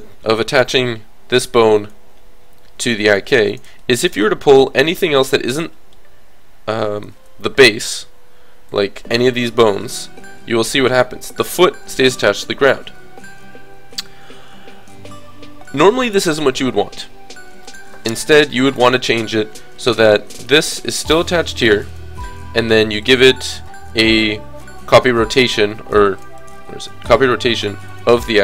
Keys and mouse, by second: 3.2 g, 3.8 click, 4.1 click, 8.7-10.5 drag, 9.7 g, 12.9-18.2 middle drag, 18.2 KP_3, 20.6-25.1 drag, 23.1 right click, 26.2-28.2 drag, 27.9 right click, 28.2 middle click.